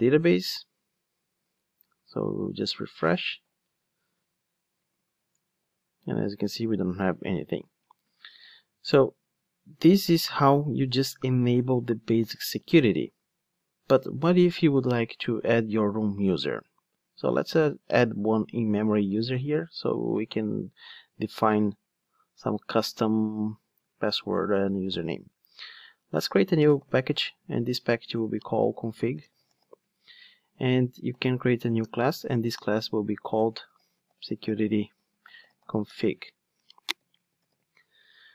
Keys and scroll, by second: 2.8 super+r, 26.9 super+n, 31.2 super+n.